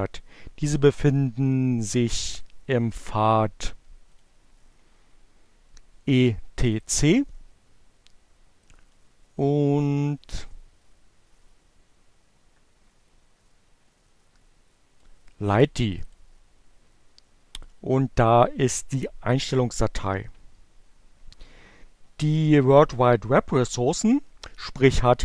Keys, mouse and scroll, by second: 2.3 click, 3.8 click, 5.7 click, 8.2-15.1 drag, 15.6 click, 17.2 click.